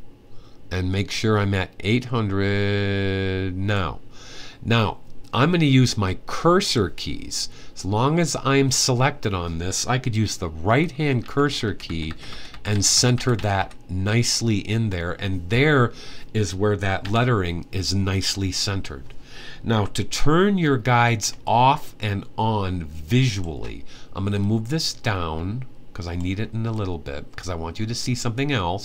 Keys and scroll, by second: 10.4 Right, 10.7 Right, 11.0 Right, 11.1 Right, 11.4 Right, 11.6 Right, 11.8-13.3 typing, 16.7 Right, 19.5 Right, 23.3 Right.